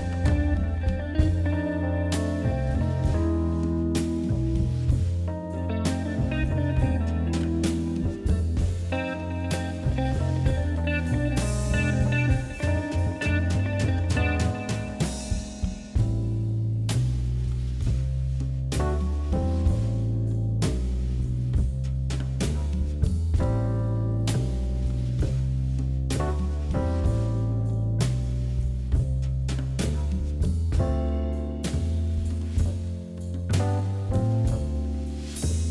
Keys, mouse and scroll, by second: 3.0 click, 4.0 shift+click, 4.6 e, 5.5 middle click, 5.9 shift+z, 6.1 scroll down 3, 6.3 middle click, 7.0 ctrl+z, 7.3-8.8 middle drag, 9.0 ctrl+z, 9.1-9.5 ctrl+z, 9.7 ctrl+z, 9.9 ctrl+z, 10.1 ctrl+z, 10.3 ctrl+z, 11.1 click, 11.3 ctrl+z, 11.6 middle click, 12.4 KP_3, 12.7 KP_1, 13.2 ctrl+z, 13.4 ctrl+z, 13.8 scroll up 2, 14.1 shift+middle click, 14.9 e, 16.2 s, 16.9 shift+z, 17.8 g, 19.0 s, 19.9 g, 20.8-21.1 scroll down 1, 21.1 middle click, 22.0 shift+z, 22.3 middle click, 23.1 middle click, 23.1 KP_3, 23.7-24.2 scroll up 2, 24.2 e, 25.2 s, 26.1 g, 27.4 s, 28.9 e, 30.2 s, 31.3 g, 32.4 s, 34.0-34.5 scroll down 1, 34.5-35.7 middle drag.